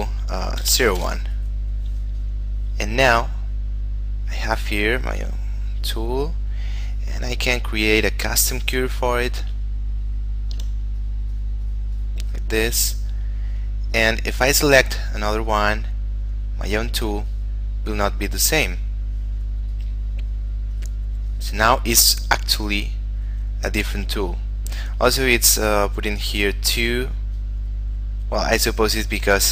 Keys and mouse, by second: 0.7-1.5 typing, 2.5 click, 5.2 click, 10.1 shift+middle click, 11.3 click, 23.6 click, 27.6 click.